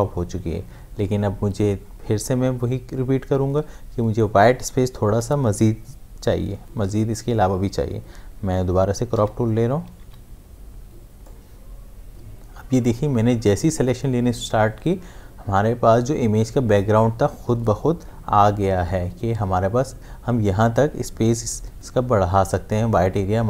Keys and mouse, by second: 9.1-10.5 typing, 11.2-21.2 drag.